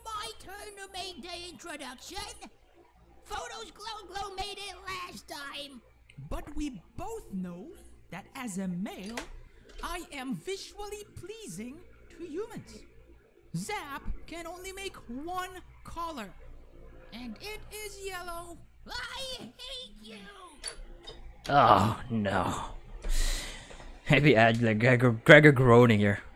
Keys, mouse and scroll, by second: 21.4 space, 24.8 click, 25.8 space.